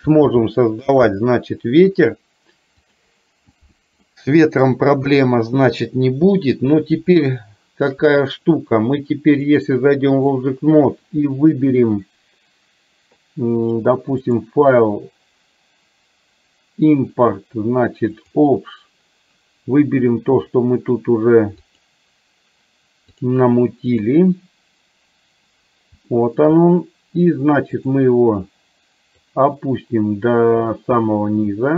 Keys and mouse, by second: 0.4 ctrl+z, 2.9 click, 4.0-4.8 middle drag, 5.0 KP_1, 7.4-8.0 middle drag, 9.8-10.4 drag, 14.4-18.6 drag, 26.3 shift+middle click, 27.9 click, 29.3-31.7 drag.